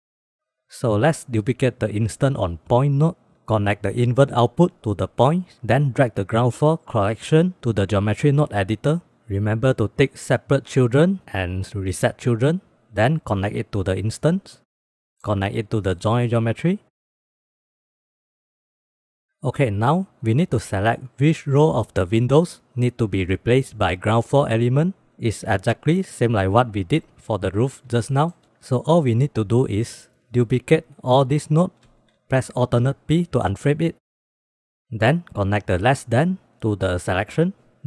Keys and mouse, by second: 0.2 middle click, 0.8 click, 1.3 drag, 1.9 shift+d, 3.5-5.4 drag, 7.1 click, 7.6 click, 8.8 click, 12.9-13.7 drag, 14.6 click, 15.6-16.8 drag, 17.3 click, 17.8 g, 18.0 click, 23.3 shift+middle click, 25.8 shift+middle drag, 27.8-28.1 shift+middle drag, 29.4-30.0 drag, 30.2-31.1 drag, 31.5 shift+d, 33.3 alt+p, 34.0 click, 34.6 click, 35.1-37.6 drag.